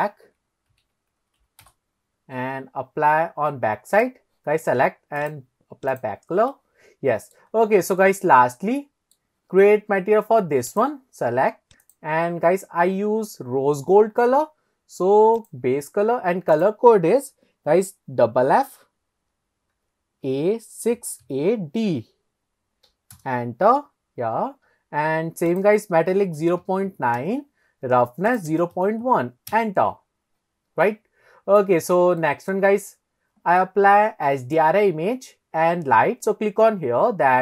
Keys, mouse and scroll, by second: 0.1-1.7 shift+drag, 2.7-3.4 scroll up 1, 3.4-3.9 scroll up 4, 3.9 click, 5.2 click, 6.5 middle click, 7.6-8.1 scroll down 1, 8.1-9.2 middle drag, 8.1-9.2 scroll down 1, 10.0-10.5 scroll up 1, 10.7 click, 11.8 click, 15.4 click, 24.6-25.0 scroll down 2, 25.5-27.2 drag, 28.3-29.6 drag, 30.1-30.8 scroll down 1, 30.8 scroll down 1, 30.8-31.7 middle drag, 31.9 scroll up 2, 32.2 shift+middle click, 33.6-34.6 middle drag.